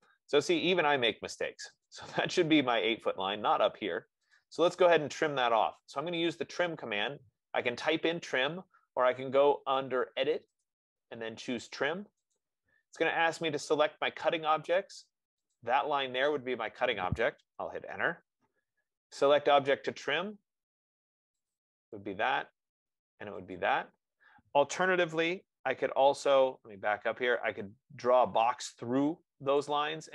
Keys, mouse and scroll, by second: 0.1 Return, 2.2 click, 4.7 click, 11.0 click, 12.7 click, 15.8 click, 18.2 Return, 21.8 click, 23.3 F15, 23.9 click, 25.6 ctrl+z, 26.7 ctrl+z, 29.9 click.